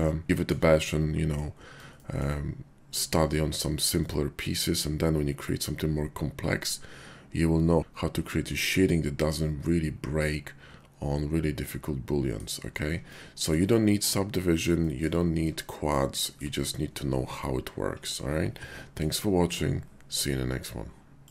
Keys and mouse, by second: 0.2 shift+click, 0.2 /, 0.8-1.4 drag, 2.0 shift+drag, 4.0-7.8 drag, 9.3-10.5 drag, 10.5-12.2 middle drag, 13.1 shift+click, 14.8 shift+click, 15.8-16.3 shift+drag.